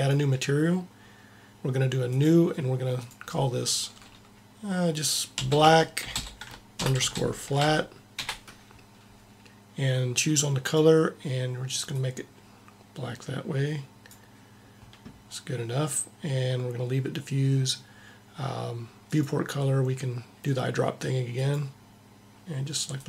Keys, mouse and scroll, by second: 2.0 click, 10.6-12.3 drag, 19.1-20.8 drag, 20.8 middle click.